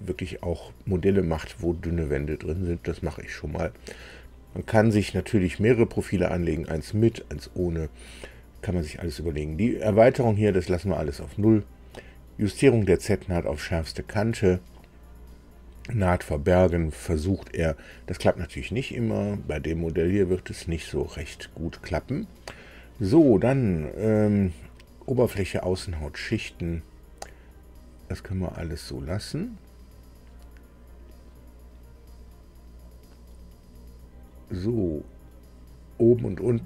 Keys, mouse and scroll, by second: 28.0-32.9 drag.